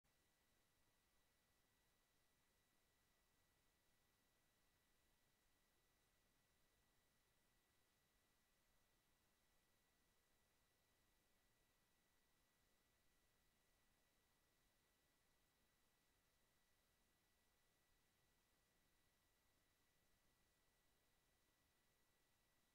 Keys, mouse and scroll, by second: 5.6 click, 6.6 click, 7.5 click, 8.3-9.4 drag, 9.7 ctrl+z, 10.1 click, 11.2 click, 13.0 click, 18.5 click, 20.1 click, 20.8 click, 21.2 click.